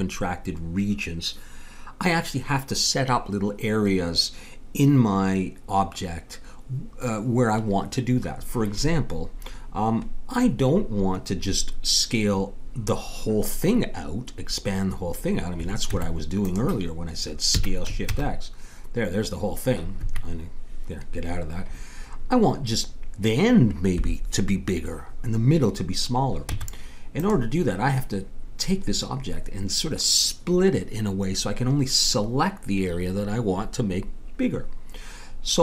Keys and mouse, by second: 15.9 Tab, 17.5 s, 26.5 Tab.